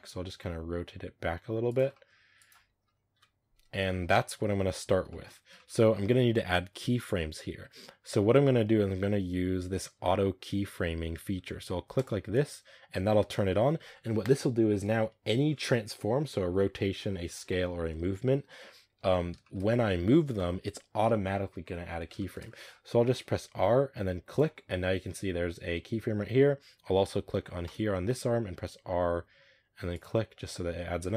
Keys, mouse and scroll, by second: 0.3 r, 1.8 middle click, 2.1 r, 3.0 middle click, 3.0 KP_0, 3.8-5.3 shift+middle drag, 5.3-6.4 scroll down 2, 5.4 shift+middle drag, 6.4-7.7 scroll down 1, 7.7-9.1 scroll down 1, 18.1-19.3 scroll down 1, 19.3-22.9 shift+middle drag, 22.3 scroll up 3, 23.4 r, 27.5 right click, 30.4 r.